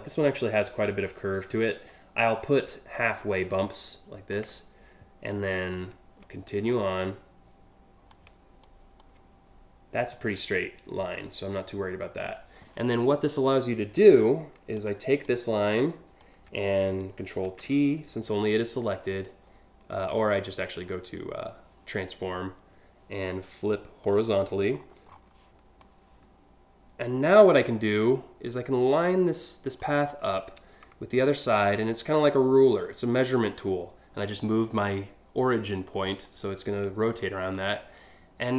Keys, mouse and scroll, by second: 0.3-2.6 ctrl+drag, 3.3 ctrl+click, 4.9 alt+click, 6.6-7.8 drag, 8.3 alt+click, 10.8-11.9 drag, 12.5 scroll down 1, 13.6 a, 14.4 click, 14.8-15.9 drag, 17.1 ctrl+t, 19.6 click, 23.6 click, 24.3-24.9 scroll down 4, 25.4-29.4 drag, 29.6 scroll down 1, 31.3-33.3 drag, 37.2-38.5 drag.